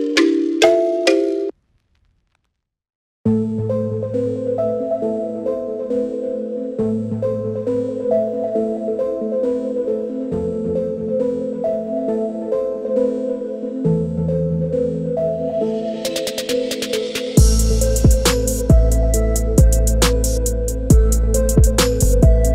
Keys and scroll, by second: 10.6 3, 10.8 5, 11.1 Return, 12.9-13.6 typing, 15.3-18.4 typing.